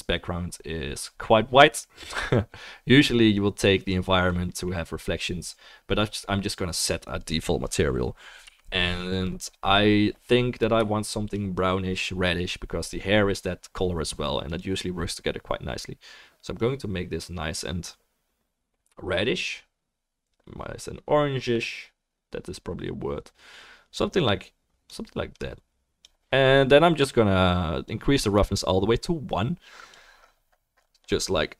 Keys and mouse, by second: 3.3-14.6 drag, 8.4 Home, 14.6-31.5 middle drag, 27.9-31.5 drag.